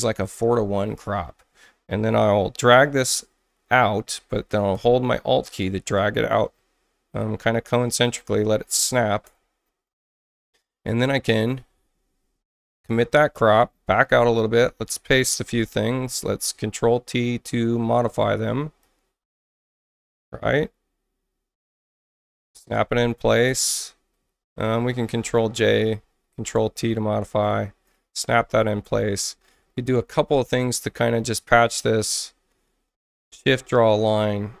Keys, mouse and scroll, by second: 0.2 click, 0.5 1, 3.1-8.1 drag, 9.2 Return, 11.3 scroll down 2, 12.7 click, 13.3 alt+middle click, 14.4 ctrl+v, 15.9 ctrl+t, 18.8-22.0 drag, 23.5 Return, 24.6 ctrl+j, 25.6 ctrl+t, 26.3-27.8 drag, 28.8 Return, 30.7 click, 31.9 click, 33.1 shift+click.